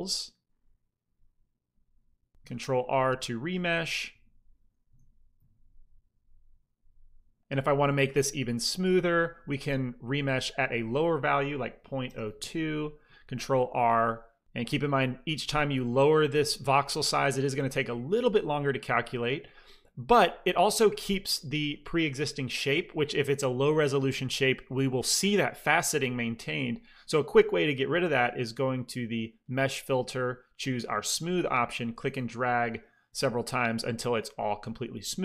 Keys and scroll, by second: 1.2 f, 2.5 ctrl+r, 4.0-5.2 typing, 11.9 KP_0, 12.1 KP_2, 12.3 Return, 13.5 ctrl+r, 17.6 f.